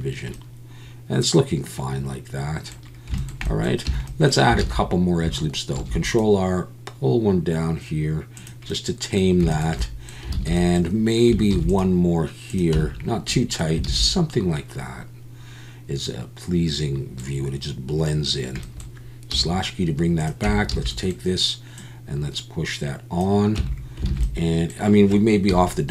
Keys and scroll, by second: 3.9 Tab, 4.6 alt+a, 5.7 ctrl+r, 10.3 alt+a, 11.5 ctrl+r, 12.7 Tab, 13.9 alt+a, 20.5 Tab, 20.7 a, 23.7 Tab, 24.1 alt+a, 25.5 KP_1.